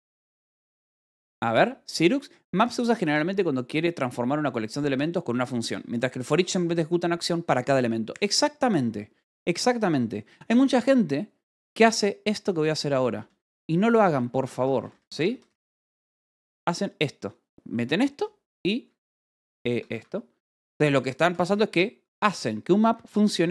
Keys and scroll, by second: 10.1-16.2 typing, 18.9 (, 19.6 x, 19.8 Escape, 21.4 j, 22.7 Escape, 22.9 k, 23.3 j.